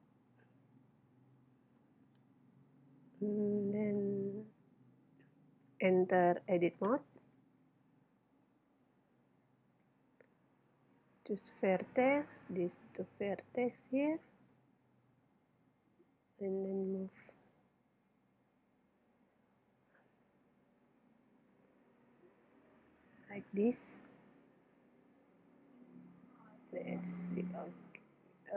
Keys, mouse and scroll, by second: 0.5-1.6 middle drag, 4.4 middle click, 7.2 Tab, 8.6 a, 9.9 ctrl+Tab, 12.4 b, 14.6-15.7 middle drag, 16.6 g, 21.5 g, 23.0-28.1 drag.